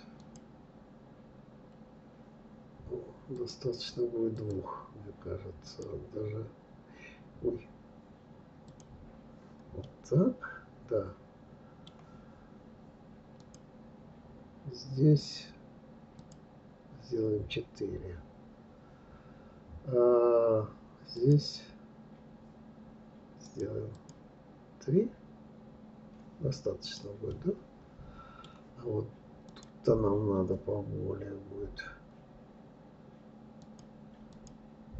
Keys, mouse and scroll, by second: 0.2 click, 3.3-7.5 drag, 8.7 click, 9.8-12.9 middle drag, 13.4-19.2 drag, 21.2-22.4 drag, 23.4-26.1 drag, 26.8 click, 27.2-29.5 middle drag, 29.5 click, 33.6-34.9 drag.